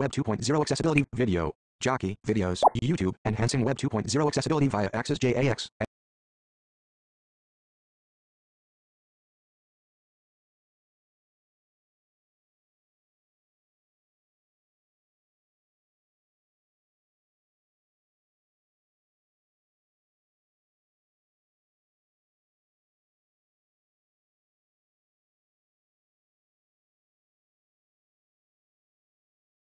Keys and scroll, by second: 0.8 Page_Down, 2.4 Page_Down.